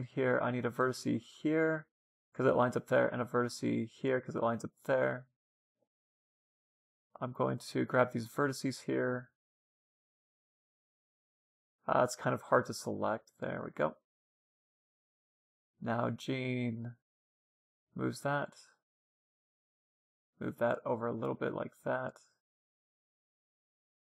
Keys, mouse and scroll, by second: 2.4 ctrl+r, 4.6-7.1 middle drag, 7.1-9.1 drag, 7.8-9.6 middle drag, 8.7-11.0 right drag, 10.1-13.1 middle drag, 11.2 a, 12.1-15.2 right drag, 14.8 g, 16.7-18.3 typing, 17.4-19.3 right drag, 19.3-20.7 middle drag, 20.7-21.7 drag, 20.7 a, 21.9 a, 22.2 a, 22.7 c, 23.4-24.0 right drag.